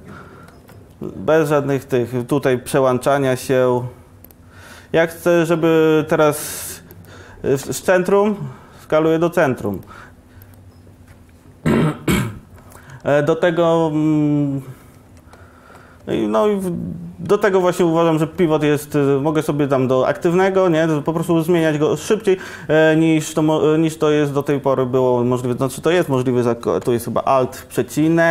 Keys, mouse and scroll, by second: 0.0 ctrl+z, 7.0 middle click, 8.3 s, 14.9 Tab, 15.1 Tab, 16.9 Tab, 17.8 Tab, 23.9 click, 27.3 alt+,.